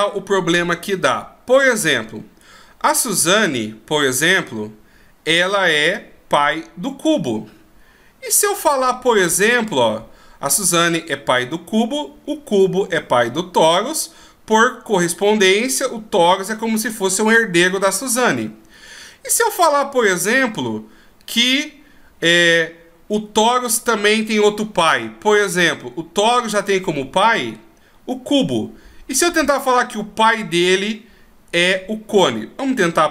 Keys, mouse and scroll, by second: 0.3-1.0 scroll up 2, 1.0-2.1 scroll down 2, 2.1-3.5 scroll up 2, 3.6-4.3 scroll down 2, 18.1-19.5 scroll up 1, 19.5 right click, 19.5-20.5 scroll up 1.